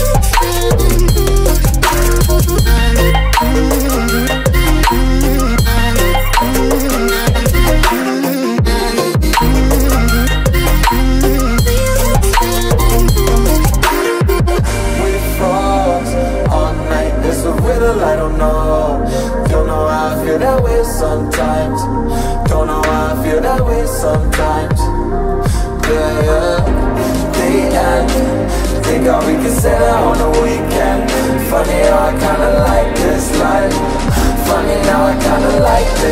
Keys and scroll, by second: 4.5 Return, 5.7 g, 6.1 i, 8.8 space, 10.5 Caps_Lock.